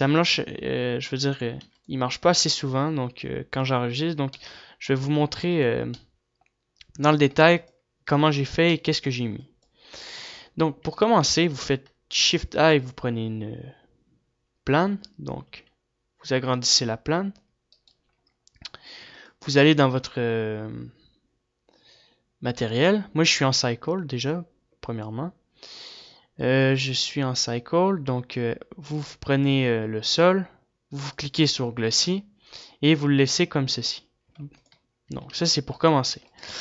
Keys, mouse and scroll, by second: 1.7 middle click, 2.7 ctrl+s, 6.4 ctrl+s, 8.4 ctrl+s, 8.6 middle click, 10.6 ctrl+s, 10.6 right click, 16.0 s, 35.4 ctrl+s, 36.2 ctrl+s, 36.2 right click, 36.2 a.